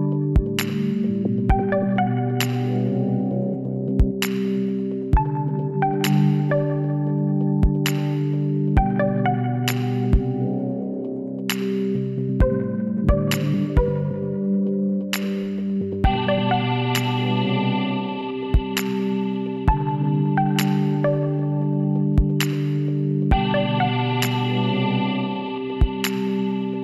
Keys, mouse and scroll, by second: 0.4-3.8 right drag, 3.2 w, 8.6 ctrl+r, 13.2 Tab, 16.3-20.0 middle drag, 20.0 Tab, 22.0 Tab, 23.4 Tab, 24.8 Tab, 25.1 a.